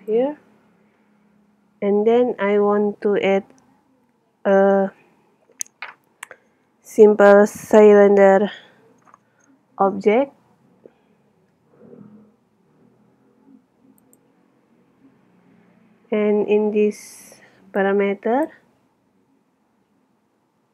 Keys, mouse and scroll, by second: 11.4 shift+a, 17.9-19.6 drag, 19.6-20.7 middle drag.